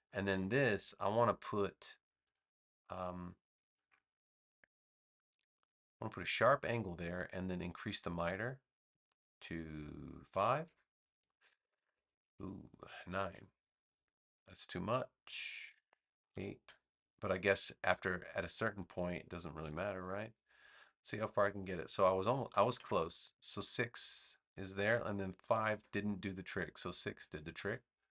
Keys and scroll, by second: 10.3 5, 10.6 Return, 13.3 9, 13.7 Return, 16.3 8, 16.6 Return, 19.6 7, 19.9 Return, 22.5 6, 22.7 Return, 25.4 5, 25.8 Return.